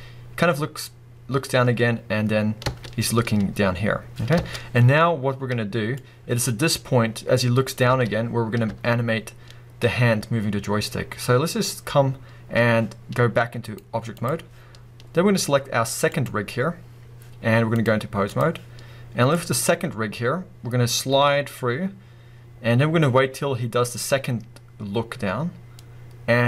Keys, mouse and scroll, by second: 2.7 space, 7.9 space, 8.7 space, 17.7-20.4 drag, 23.3-26.4 drag.